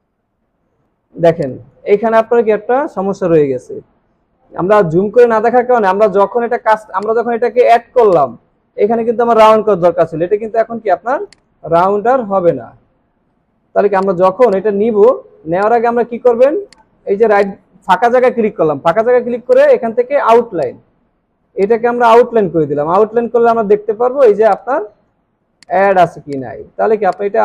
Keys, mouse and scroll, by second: 4.8 alt+scroll up 1, 6.3 alt+scroll down 1, 6.9 space, 7.7 alt+scroll down 1, 8.0 space, 9.8-10.5 alt+scroll down 1, 11.2 space, 12.3 ctrl+z, 15.1 alt+scroll up 1, 15.6 right click, 16.2 alt+scroll down 1, 17.1 alt+scroll down 1, 22.9 alt+scroll up 1, 25.0 space, 25.3 alt+scroll down 1, 25.5 space, 26.0 alt+scroll down 2, 26.3 space, 26.8 alt+scroll down 2, 27.1 space.